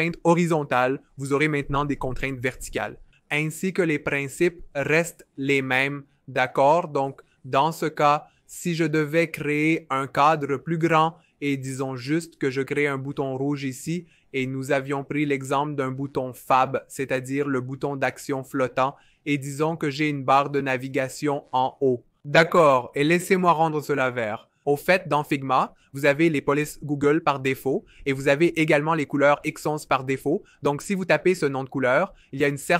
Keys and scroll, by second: 8.3 f, 11.0 o, 16.2-17.4 typing, 18.7 typing, 24.0-25.4 typing.